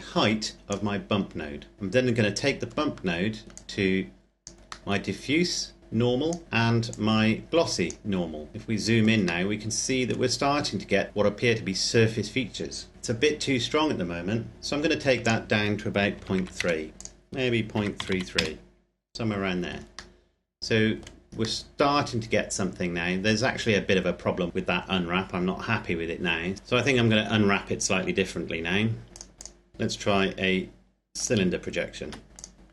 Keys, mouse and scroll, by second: 0.7-1.7 scroll up 1, 2.5-3.3 scroll down 1, 3.3 click, 4.6 middle click, 5.7 click, 8.5-9.2 scroll up 1, 9.2 middle click, 13.2-14.8 scroll up 1, 14.9 click, 15.9 KP_Decimal, 16.1 KP_3, 16.6 KP_Enter, 16.9 click, 17.5 KP_Decimal, 17.7 KP_3, 18.4 KP_Enter, 19.9 middle click, 25.5-26.5 scroll down 1, 26.5 middle click, 29.1 click, 29.7 u, 31.0 click, 31.8 Tab, 32.3 click.